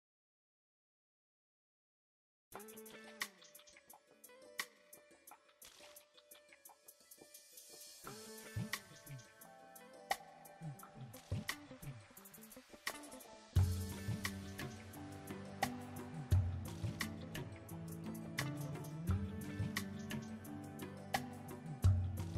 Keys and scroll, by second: 2.5 Tab, 19.5 a, 20.3 s.